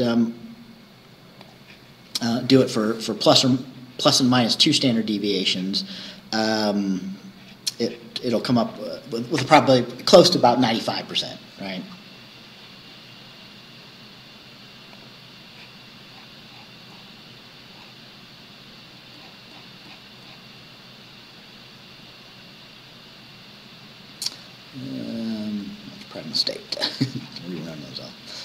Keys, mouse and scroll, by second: 1.5 click, 15.0 click, 16.1-17.3 scroll down 6, 17.8-18.1 scroll down 2, 18.9 scroll down 2, 20.7-24.0 scroll up 2, 24.0-24.3 scroll up 1, 24.3 scroll down 2, 26.7-27.3 scroll up 2.